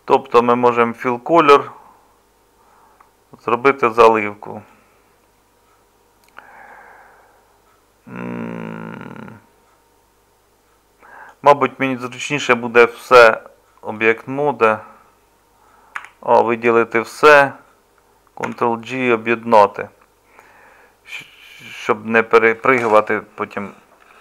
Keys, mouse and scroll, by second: 16.0 a, 18.5 ctrl+j.